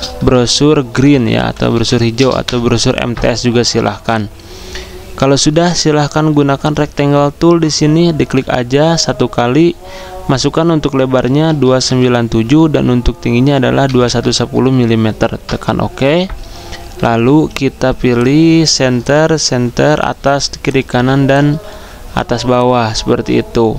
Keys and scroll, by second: 0.0-2.5 typing, 4.3 typing, 8.7 z, 11.2-12.3 typing, 12.3 Tab, 13.8 typing, 15.2-17.5 typing, 19.2-20.9 typing.